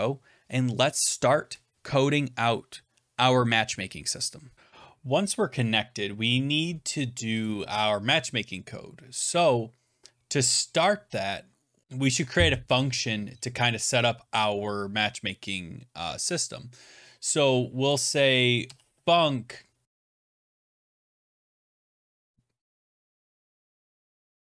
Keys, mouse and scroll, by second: 4.5 click, 7.3 click, 7.6 scroll down 6, 8.3-8.9 scroll down 4, 8.9-10.0 scroll down 15, 11.3 scroll up 6, 11.8-12.5 scroll down 1, 16.0 click, 17.9 click, 18.3-22.5 typing, 19.8 click, 24.3-24.4 typing.